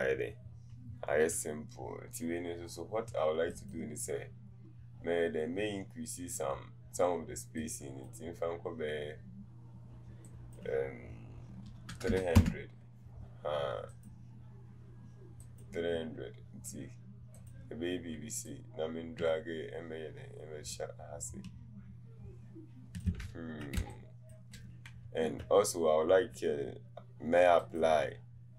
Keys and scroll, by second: 11.7 KP_3, 11.9 KP_0, 12.4 Return, 12.4 Return.